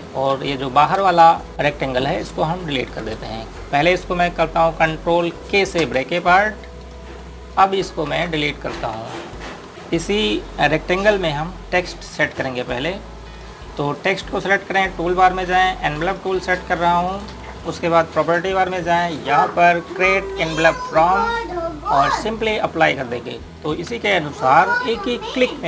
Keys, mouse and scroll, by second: 1.5 space, 3.6 ctrl+Num_Lock, 6.6 ctrl+k, 7.6 click, 8.9 ctrl+z, 9.6 Delete, 9.7 scroll down 1, 13.0 click, 21.5 click, 24.7 space.